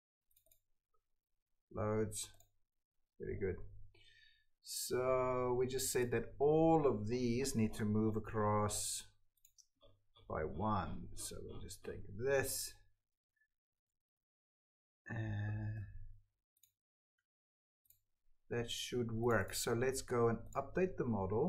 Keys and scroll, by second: 15.6 ctrl+x, 16.9 ctrl+v.